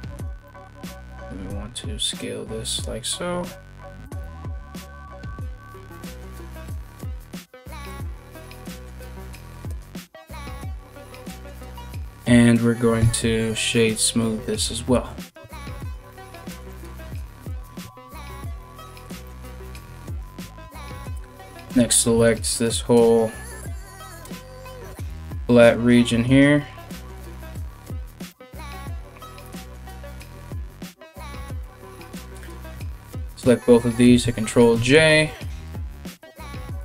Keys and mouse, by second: 0.5 alt+s, 4.4 ctrl+b, 9.5 Tab, 12.6 w, 14.9 Tab, 15.2 3, 15.4 ctrl+right click, 17.1 ctrl+right click, 17.9-32.6 ctrl+middle drag, 19.7 ctrl+right click, 20.3 ctrl+right click, 20.5 ctrl+z, 21.0 ctrl+right click, 22.1 ctrl+right click, 22.6 ctrl+right click, 23.5 ctrl+right click, 24.7 ctrl+right click, 25.3 ctrl+right click, 25.9 ctrl+right click, 26.7 ctrl+right click, 31.2 Tab, 31.2 i, 32.6 shift+right click, 32.8-35.8 ctrl+shift+middle drag, 33.6 ctrl+j, 35.0 KP_1, 35.0 a, 35.1 a, 35.8 right click, 36.0-36.8 middle drag, 36.4 Tab.